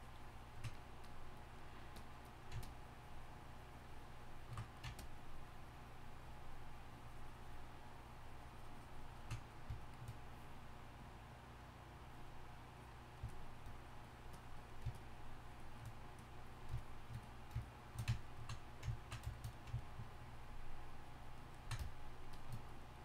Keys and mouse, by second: 4.6 middle click, 5.0-13.8 drag.